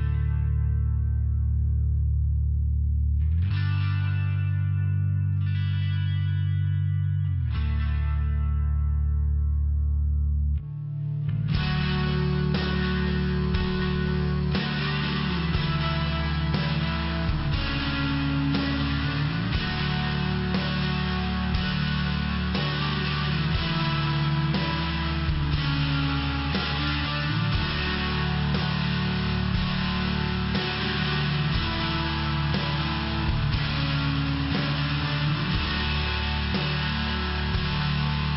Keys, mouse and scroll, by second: 0.8 click, 3.7 click, 4.4 click, 5.6 click, 6.9 click, 7.6 click, 9.1 click, 10.4 click, 10.5 click, 12.6 click, 13.6 click, 14.2 click, 14.4 click, 15.8 click, 17.0 click, 17.2 click, 17.8 click, 18.4 click, 19.2 click, 20.8 click, 21.1 click, 22.3 click, 22.5 click, 23.8 click, 23.9 click, 31.7 click, 32.2 click, 33.2 click, 34.4 click, 35.3 click, 36.9 click, 37.9 click.